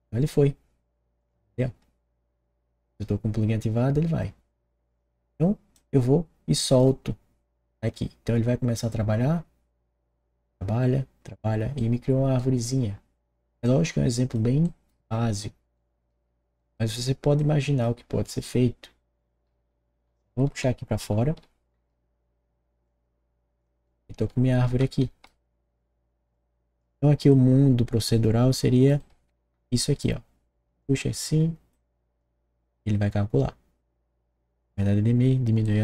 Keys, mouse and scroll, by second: 1.1 click, 4.8 click, 5.7-6.8 drag, 11.7 right click, 13.6 click, 15.7 right click, 16.1 middle click, 16.5 right click, 17.3 click, 18.4-21.4 right drag, 19.4-21.4 typing, 21.4 click, 22.8 click, 23.8-25.2 drag, 24.0 w, 24.6 d, 25.0 s, 26.6 click, 27.3-28.8 drag, 28.8-29.8 typing, 29.0-30.8 drag, 31.7 click, 35.6-35.8 right drag.